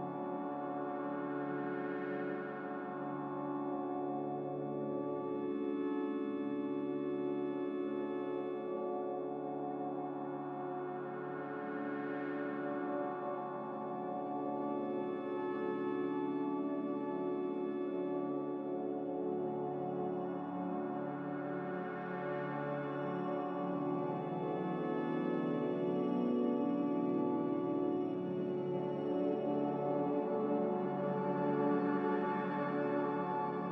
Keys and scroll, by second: 14.3 Escape, 14.4 Escape, 14.8 Escape, 21.7 Escape, 22.6 n.